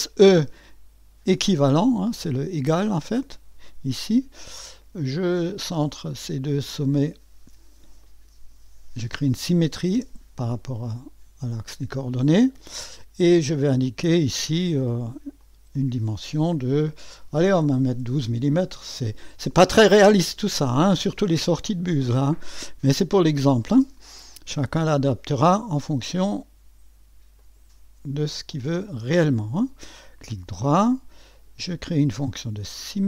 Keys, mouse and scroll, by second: 1.3 e, 5.2 click, 6.6 click, 8.0 click, 9.9 s, 13.8 click, 15.4 click, 17.4-18.1 typing, 18.2 Return, 20.3-20.8 scroll up 1, 20.4 typing, 25.4 click, 27.3 click, 29.1 click, 31.3 click, 32.7 click.